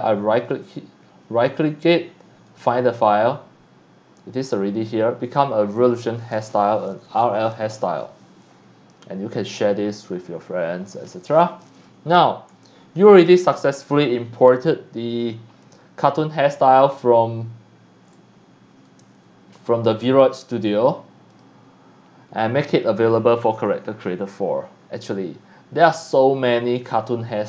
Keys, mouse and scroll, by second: 0.0 right click, 2.5 click, 11.1 click, 11.8 scroll down 1, 12.5 scroll up 1, 12.8-13.3 scroll down 2, 13.4 c, 13.5-14.7 drag, 15.6 click, 16.7-17.2 scroll down 1, 18.8 click, 21.3 click, 25.8 click.